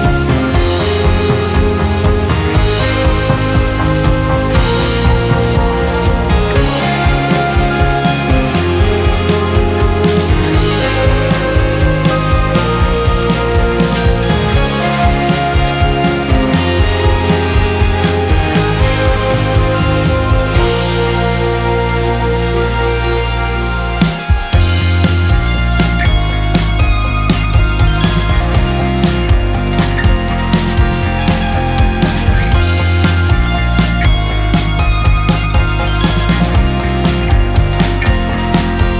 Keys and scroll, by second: 1.4 g, 2.4 z, 4.0 space, 5.3 d, 8.9 Escape, 10.2 z, 14.9 q, 15.7 space, 16.4 space, 18.6 z, 19.4 z, 19.9 g, 20.9 g, 22.3 z, 26.0 q.